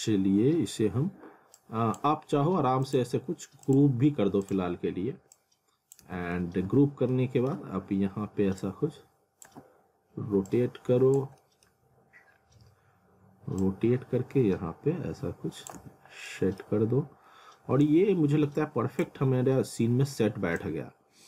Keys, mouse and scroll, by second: 0.0 scroll down 1, 1.6 click, 6.1-7.2 typing, 7.1 middle click, 7.6-8.6 scroll down 1, 8.6 click, 9.5 w, 10.5 click, 11.4 middle click, 12.3 scroll up 1, 13.6 click, 15.7 z, 16.3 middle click, 17.8 click, 19.1 z, 20.6 click.